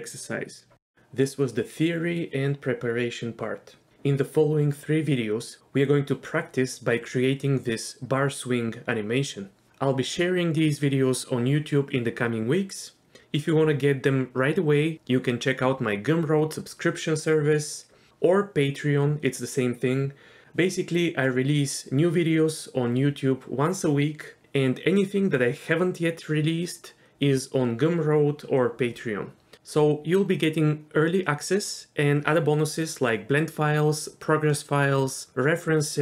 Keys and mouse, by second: 3.7 ctrl+z, 3.7 shift+space, 3.9 click, 4.6 shift+space, 14.9 ctrl+z, 14.9 click, 14.9 shift+space, 15.4 shift+space.